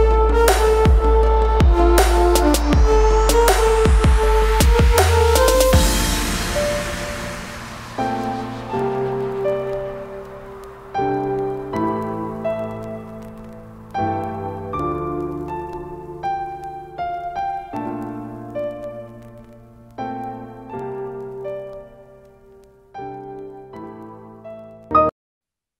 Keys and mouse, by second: 0.7-1.0 typing, 4.2 click, 4.7-5.6 typing, 7.2 click, 8.0-8.7 typing, 11.0 click, 14.9 click, 18.5 click, 19.2 Up, 23.2 click, 25.1 click.